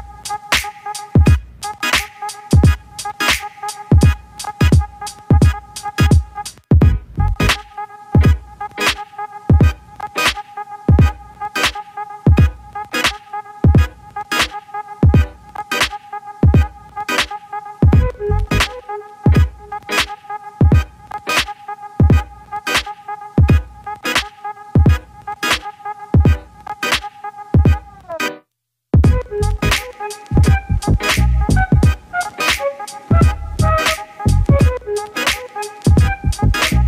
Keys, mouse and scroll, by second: 0.0 shift+a, 0.9 s, 3.1-3.6 scroll down 2, 3.6-5.6 middle drag, 5.7 middle click, 6.2 shift+a, 8.3-13.9 drag, 14.4 click, 15.2 g, 17.9 click, 19.0 click, 19.8 click, 20.4-26.0 drag, 26.3-26.9 right drag, 27.2 click, 27.5-28.6 right drag, 28.6 click, 29.2 click, 29.7 click, 30.5 click, 32.2-34.8 drag, 35.3 click, 36.4-36.8 drag.